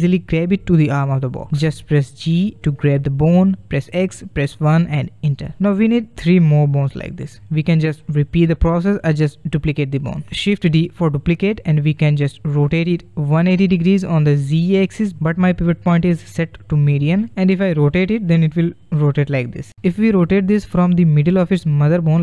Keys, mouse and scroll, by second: 0.0 alt+p, 0.4 g, 10.9 shift+d.